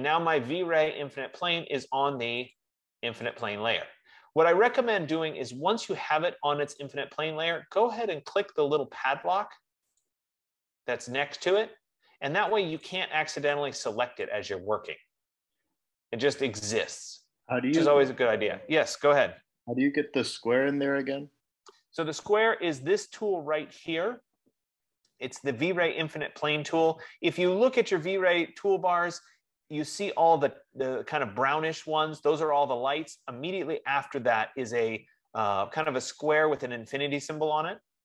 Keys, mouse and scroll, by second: 2.8 click, 3.7 click, 6.7 F15, 10.2 click, 13.5 click, 13.7 click, 14.5 click.